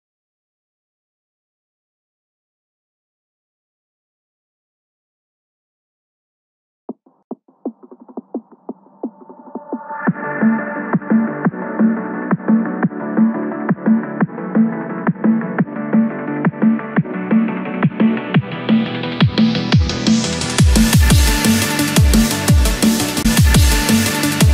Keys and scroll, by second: 3.1 ctrl+=, 3.3 ctrl+space, 16.0 ctrl+-, 17.4 ctrl+=, 17.7 ctrl+space, 18.1 ctrl+=, 19.3 ctrl+=.